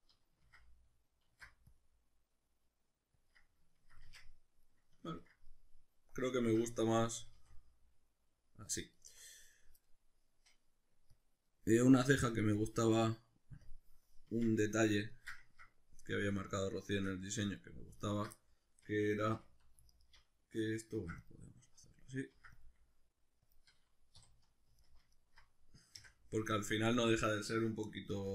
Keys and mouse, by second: 0.4 ctrl+z, 1.3 alt+e, 3.3 click, 3.4-9.5 middle drag, 4.1 Tab, 7.2 a, 9.5 right click, 11.2 click, 12.6 drag, 13.6-14.6 drag, 14.3 Tab, 14.6-18.0 middle drag, 18.0 alt+right click, 18.3-19.9 middle drag, 19.3 2, 19.9 alt+right click, 20.9 ctrl+r, 21.9 click, 22.3 ctrl+r, 23.6 click, 24.2 3, 24.8 alt+right click, 25.2 alt+shift+right click, 26.0 x, 27.0-28.3 middle drag, 28.1 2.